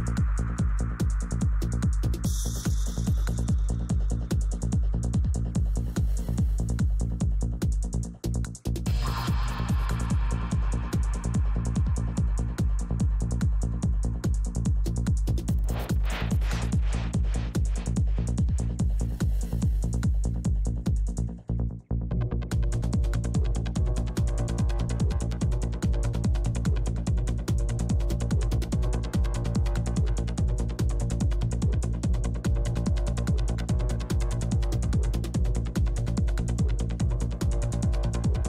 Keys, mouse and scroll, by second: 0.0-1.2 middle drag, 0.9-2.4 drag, 2.0 middle click, 2.6-5.3 drag, 4.6 middle click, 6.0-8.8 drag, 6.0 middle click, 6.8 middle click, 7.7-8.8 right drag, 8.8 middle click, 8.9-11.4 drag, 8.9 right click, 10.9 right click, 11.2-20.2 middle drag, 12.2-27.1 drag, 23.8-32.5 middle drag, 28.2-31.3 drag, 31.9-34.2 drag, 34.8-38.0 drag, 34.8-37.1 middle drag, 38.0-38.4 middle drag.